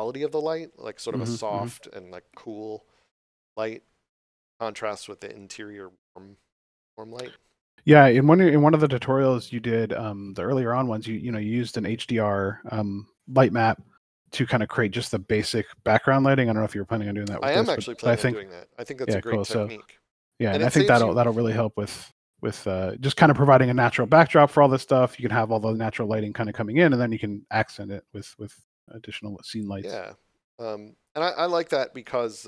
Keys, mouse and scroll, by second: 7.2 scroll down 1, 7.7 middle click, 11.0 shift+middle click, 11.7 middle click, 14.1 ctrl+middle click, 14.9 shift+middle click, 15.7 middle click, 25.5 middle click, 31.2 scroll down 1.